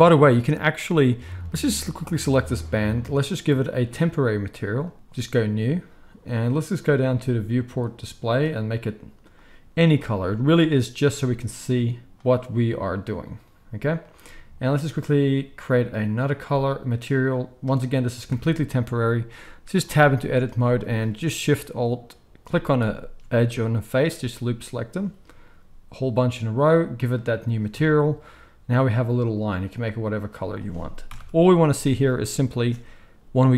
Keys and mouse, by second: 1.3-4.1 middle drag, 4.1-8.6 drag, 8.6-12.1 middle drag, 12.1-22.9 drag, 18.3 Tab, 20.5 alt+a, 22.9-27.1 alt+shift+middle drag, 27.1-29.4 drag, 27.7 Tab, 29.4-33.5 middle drag, 31.1 shift+Left, 32.6 space.